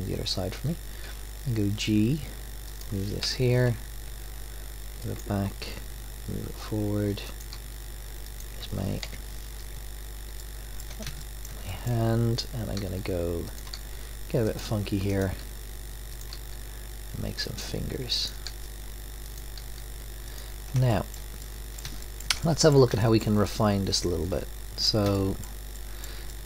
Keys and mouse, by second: 1.0 g, 3.2 KP_3, 4.1 g, 5.6 e, 7.5 e, 9.0 KP_7, 12.8 e, 13.7 e, 15.1 click, 15.4 e, 16.3 e, 18.5 e, 19.6 e, 20.0 middle click.